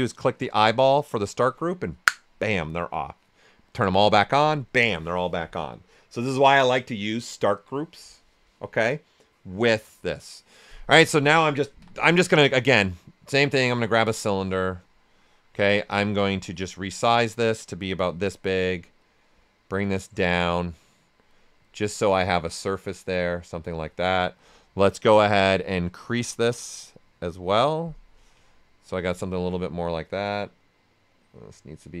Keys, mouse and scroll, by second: 0.4 click, 3.9 click, 11.7 w, 12.2 right click, 13.2 click, 14.6 right click, 15.4 w, 15.9 ctrl+right click, 16.6-18.0 drag, 18.0 right click, 19.0-21.3 drag, 21.3 right click, 22.4-24.3 drag, 24.3 click, 26.0-27.8 drag, 28.5 right click, 29.1 ctrl+right click, 30.1-32.0 drag.